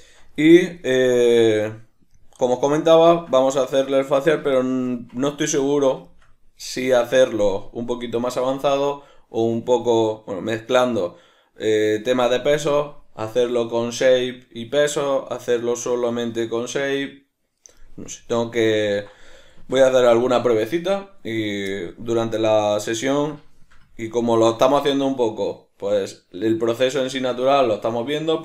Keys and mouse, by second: 1.0 right click, 2.1-28.4 middle drag.